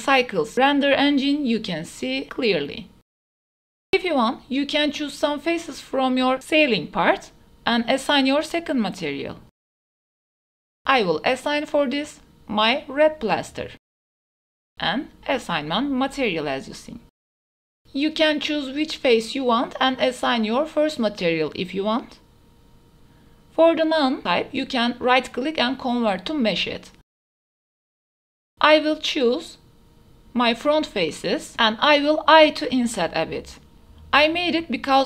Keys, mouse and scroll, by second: 0.3-0.7 middle drag, 1.1 KP_0, 2.3 a, 3.2 click, 3.3 middle drag, 4.8 Tab, 4.9 click, 5.7 3, 6.2 alt+click, 7.4 alt+click, 7.8 middle click, 9.7 middle click, 10.1 middle click, 10.7-14.5 alt+shift+drag, 14.6 click, 15.3 middle click, 16.7 shift+middle drag, 17.3 middle click, 19.2 click, 20.1 click, 20.5 Tab, 21.0-21.4 drag, 21.5 Tab, 22.2-23.2 drag, 23.8 Tab, 23.9 Tab, 24.0 click, 24.7 ctrl+s, 24.7 click, 25.4-25.9 middle drag, 26.4-27.0 drag, 28.7 middle click, 28.9 Tab, 30.6 3, 30.9 click, 31.3 click, 31.7 drag, 32.2 shift+click, 32.6 shift+drag, 33.5 shift+middle click, 33.6 shift+click, 33.7 shift+middle click.